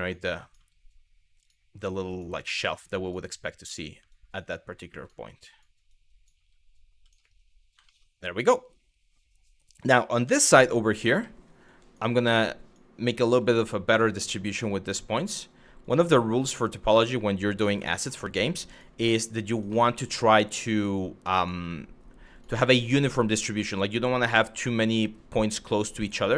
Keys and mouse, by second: 0.1 click, 0.2 g, 1.0 click, 1.6 click, 2.6 click, 3.2 click, 3.3 g, 3.8 click, 4.6 click, 5.2 click, 5.6 click, 6.6 click, 7.5 shift+middle click, 10.0 shift+middle click, 10.8 shift+middle click, 11.3 click, 12.0 click, 12.8 g, 13.5 click, 14.0 click, 14.1 g, 15.4 click, 15.8 click, 17.2 click, 17.5 middle click, 18.1 click, 19.2 click, 19.5 middle click, 20.1 click, 20.6 click, 21.9 click, 22.3 middle click, 23.1 click, 23.8 click, 25.0 click, 25.6 click.